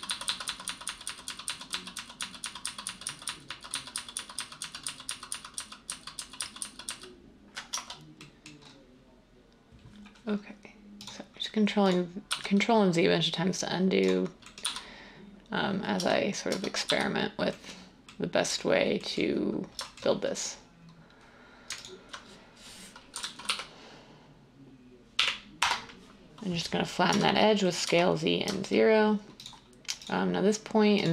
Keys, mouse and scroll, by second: 0.0 ctrl+z, 0.2 ctrl+z, 8.2 Tab, 12.2 x, 14.6 z, 16.0 Tab, 16.5 Tab, 16.8 z, 23.1-23.4 typing, 25.2-26.1 typing, 27.1 Tab, 27.8 Tab.